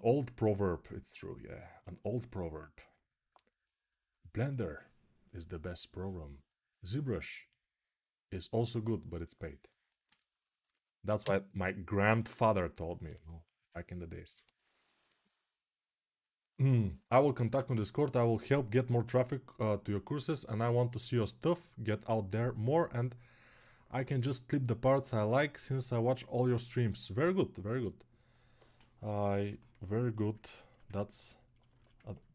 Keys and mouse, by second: 30.4-32.3 ctrl+alt+shift+right drag.